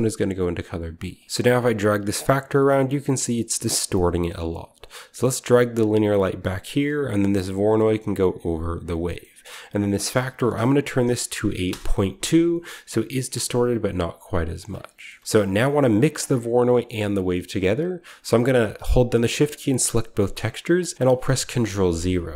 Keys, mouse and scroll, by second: 1.2 ctrl+alt+Left, 1.2-2.6 scroll up 1, 1.6-3.5 middle drag, 2.6-3.5 scroll up 1, 4.6 click, 6.5 click, 6.8 click, 8.7-9.8 drag, 9.8 middle click, 9.9-11.0 drag, 11.2-11.6 typing, 11.6 Return, 12.4-13.3 scroll down 1, 13.3-14.6 middle drag, 13.3-14.3 scroll down 1, 14.6 click, 14.6-15.5 typing, 14.7 middle click, 14.7-15.5 scroll down 1, 14.8 middle click, 15.0 alt+Left, 15.2 click, 15.2 middle click, 16.4-16.8 scroll down 1, 16.9 scroll up 1, 17.2 scroll down 1, 18.5 click, 18.6-20.5 shift+middle drag, 18.6 scroll up 1, 21.2 ctrl+0, 22.3 scroll up 1.